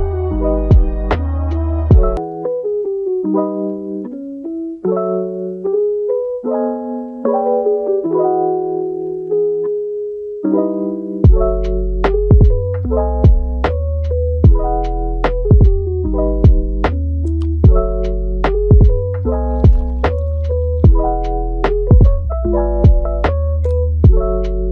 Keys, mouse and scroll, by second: 1.1 click, 1.4 g, 2.5 click, 3.2-5.0 middle drag, 5.0 scroll down 2, 5.3-6.5 middle drag, 6.5 scroll up 2, 6.6-7.6 middle drag, 7.6 Tab, 7.9 click, 8.3-9.5 middle drag, 9.5 shift+d, 10.5 middle click, 10.9 Tab, 13.5 r, 16.0 middle click, 16.7 r, 17.9 middle click, 18.5 r, 19.1 middle click, 20.0 r, 23.8 middle click, 24.4 g.